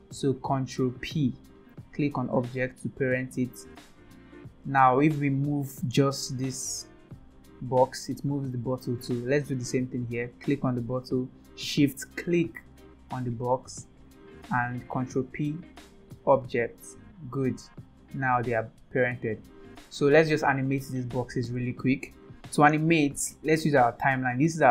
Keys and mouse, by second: 0.9 ctrl+p, 4.5 drag, 5.3 click, 6.5 g, 12.3 shift+click, 14.9 ctrl+p, 16.9 click, 17.4 click, 18.4 g, 22.8-24.7 drag.